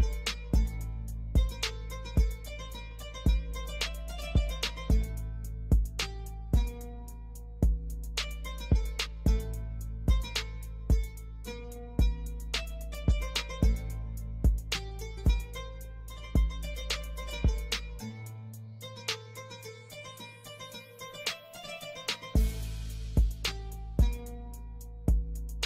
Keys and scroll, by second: 1.3 F4, 4.7 Escape, 9.9 space, 10.7 shift+F2, 11.3 Escape, 17.5 F3, 23.6 shift+Page_Up, 24.5 F2.